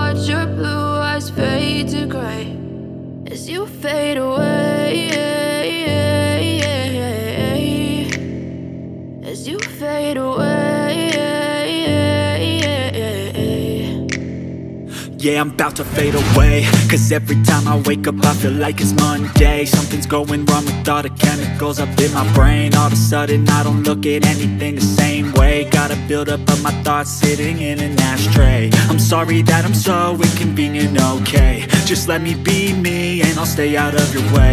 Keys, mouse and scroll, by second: 0.8 click, 2.0 click, 2.6 scroll down 1, 2.9 click, 4.4 double click, 5.4 click, 8.7 click, 10.5 click, 11.4 double click, 11.8-12.1 scroll down 1, 12.1-12.6 scroll up 1, 14.2 double click, 15.5 right click, 16.4 scroll up 1, 17.3 click, 17.5 F4, 18.7 F9, 19.8 double click, 20.4 click, 21.8 double click, 25.1 click, 26.0 double click, 26.7 click, 27.3 F4, 28.2 F9, 29.4 click, 29.9 click, 30.8 ctrl+o, 31.6-31.9 scroll down 1, 33.2 scroll down 1, 33.9 scroll down 1, 34.1-34.5 scroll up 1.